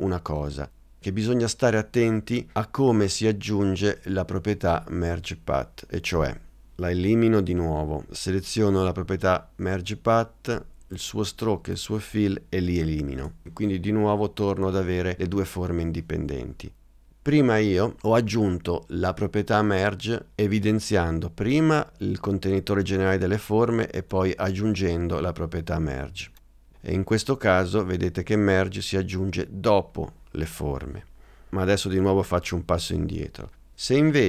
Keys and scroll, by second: 13.2 BackSpace, 33.0 super+z.